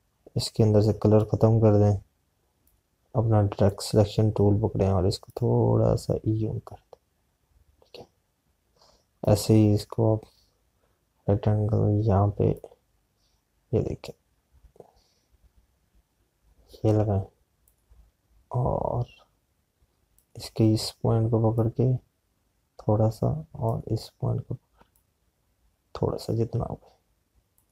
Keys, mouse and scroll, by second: 13.4 click, 21.0 click.